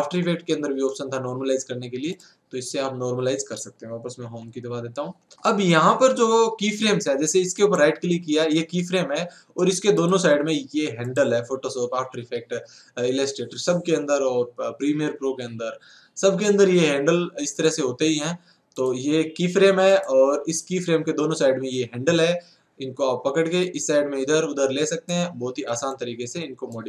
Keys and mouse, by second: 23.7-25.4 right drag, 26.8 right click.